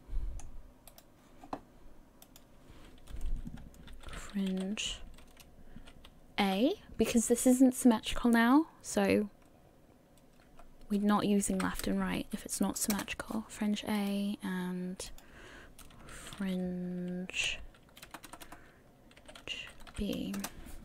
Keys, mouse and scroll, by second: 1.1 right click, 2.2 click, 14.2 right click, 15.1 click, 16.9 i.